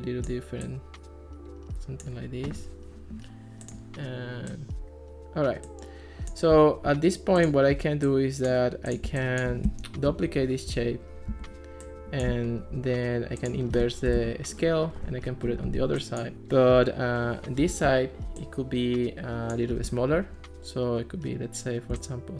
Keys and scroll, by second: 9.7 Escape, 10.3 alt+r, 11.3 super+d, 13.9-14.8 typing.